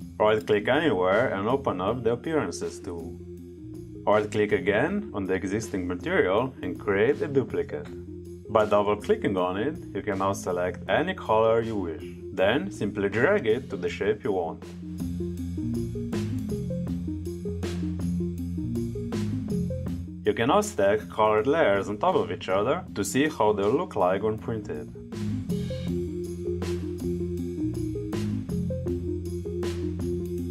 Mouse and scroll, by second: 1.0 right click, 2.3 click, 4.2 right click, 5.9 click, 8.2 click, 10.6-12.7 drag, 15.1-16.7 drag, 16.8 click, 17.3 right click, 17.4 click, 17.4 click, 17.7 click, 17.9 click, 18.2 click, 18.4 click, 18.7 right click, 18.9 click, 19.2 drag, 19.4 click, 19.6 click, 19.7 click, 19.8 click, 20.1 click, 20.3 click, 20.5 click, 20.7 click, 21.0 click, 21.2 click, 21.7 right click, 21.9 click, 22.0 click, 22.3 click, 23.1 click, 23.4 click, 23.8 click, 23.9 click, 24.1 click, 24.3 click, 24.6 click, 24.8 click, 25.0 click, 25.7 right click, 25.8 click, 25.9 click, 26.0 click, 26.2 click, 27.0 right click, 27.2 click, 27.6 click, 27.7 click, 27.9 click, 28.4 click, 28.6 click, 28.7 click, 30.1 click.